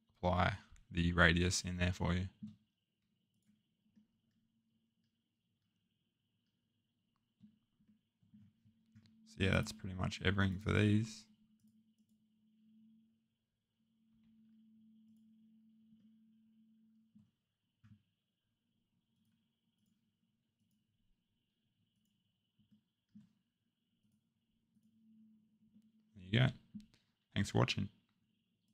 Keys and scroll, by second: 14.1 2, 18.1 typing.